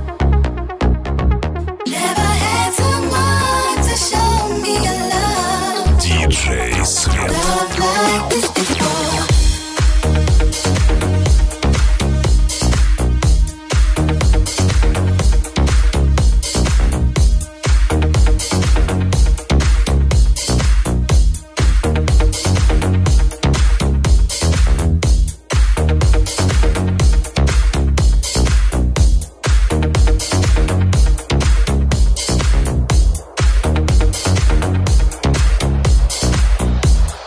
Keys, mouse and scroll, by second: 0.8 ctrl+z, 5.1 alt+middle click, 5.1 alt+right click.